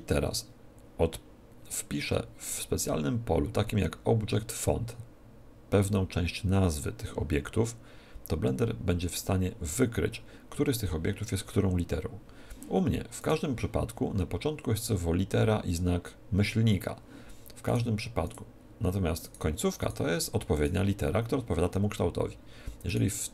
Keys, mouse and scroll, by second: 2.2-13.1 middle drag, 13.1 right click, 17.6-22.5 right drag, 22.8 right click.